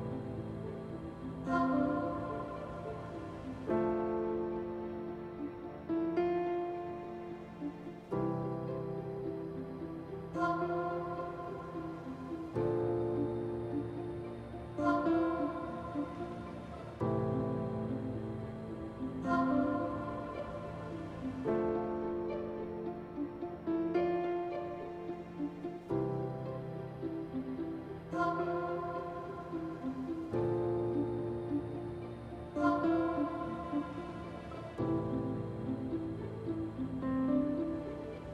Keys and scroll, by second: 8.0 F4, 9.7 s, 16.6 F4, 28.7 s, 31.5 ctrl+z, 36.2 f.